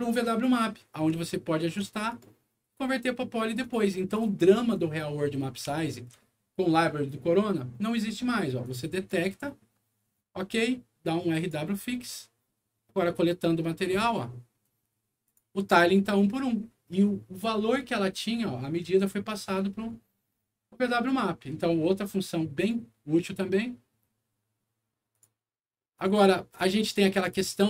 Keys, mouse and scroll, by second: 0.7 middle click, 1.2 alt+middle click, 2.0 alt+right click, 3.5 alt+click, 4.1 alt+click, 5.0 middle click, 5.7 alt+middle click, 8.6 alt+click, 9.0 alt+click, 11.3 click, 13.1 click, 14.5-14.9 scroll up 2, 15.2 click, 21.1 middle click, 22.5 right click, 25.1 click, 25.9 click, 26.4 click, 26.9 scroll down 2, 27.4 scroll up 2.